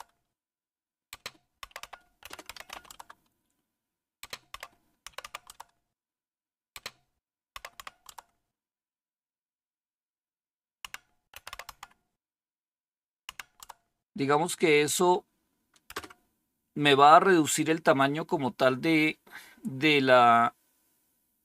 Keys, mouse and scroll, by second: 0.0-8.0 typing, 10.8-12.1 typing, 13.2-13.5 typing, 14.7 typing, 15.8 Return.